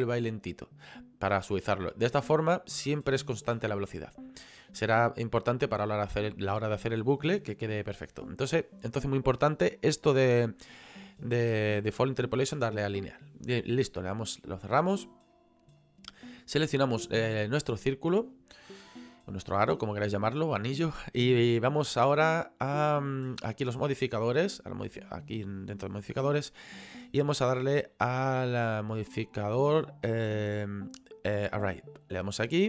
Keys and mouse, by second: 13.4 click, 15.8 right click, 17.0 middle click, 25.1 click, 27.9 click, 32.3 click.